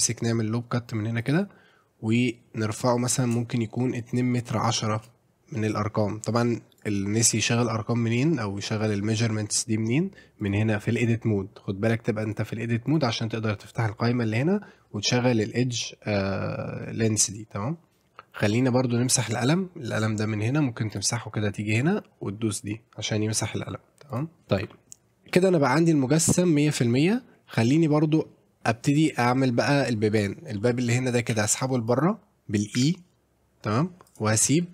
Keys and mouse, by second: 1.2 click, 6.8-8.6 drag, 10.4 click, 12.2 click, 13.7-18.0 drag, 19.4 click, 20.9 click, 21.7-22.7 drag, 24.1 click, 24.5 shift+middle click, 25.3 middle click, 26.8-28.2 middle drag, 29.7 middle click, 30.2 click, 30.6 middle click, 31.3 r, 32.8 e, 34.1 click.